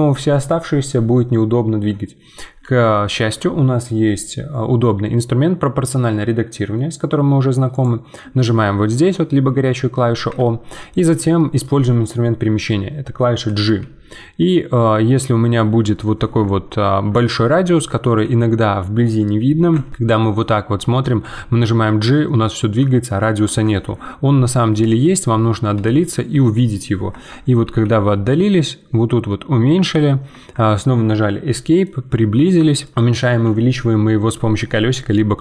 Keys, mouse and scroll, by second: 3.1 ctrl+z, 7.7-10.7 drag, 11.1-13.7 middle drag, 13.7 g, 17.5-18.2 scroll down 9, 18.2 g, 19.8-20.2 scroll up 2, 20.2 shift+middle click, 20.5 scroll up 1, 20.8 middle click, 21.2 g, 24.1-24.8 scroll down 10, 24.8 middle click, 25.3-25.7 scroll down 1, 25.7 g, 27.6 g, 31.6 middle click, 32.0-32.3 scroll up 10, 32.6-35.2 shift+middle drag.